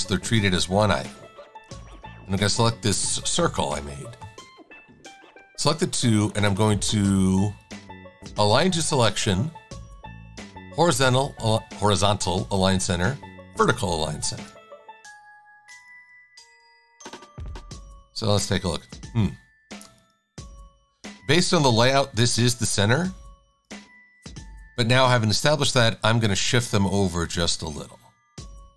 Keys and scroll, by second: 0.7 super+z, 14.4 shift+super+a, 15.0 v, 18.6 shift+super+a, 25.5 Right, 25.9 Right, 26.5 Right, 26.7 Right, 27.0 Right, 27.5 Right, 28.4 Right, 28.6 Right.